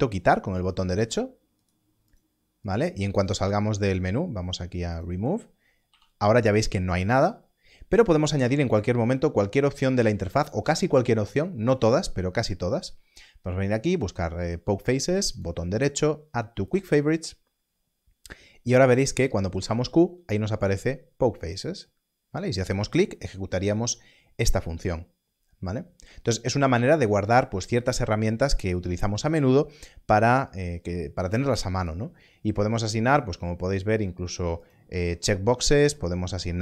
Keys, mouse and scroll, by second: 0.5 click, 1.5 right click, 2.0 click, 2.6 right click, 3.1 click, 5.8 click, 8.7 click, 15.3 right click, 16.6 click, 19.5 click, 20.5 q, 31.7 q, 33.0 right click, 34.6 click.